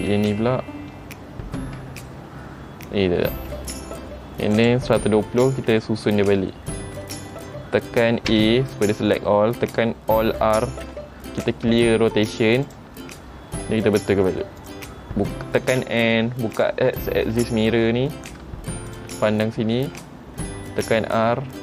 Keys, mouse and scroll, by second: 0.0 click, 4.7 click, 5.4 middle click, 6.2-7.1 scroll up 2, 6.7 middle click, 7.2 shift+middle click, 8.5 a, 10.8 alt+r, 12.8 click, 14.0 r, 15.9 n, 16.7 click, 17.5 n, 19.1 click, 19.5 scroll up 3, 19.9 shift+middle click, 21.0 r.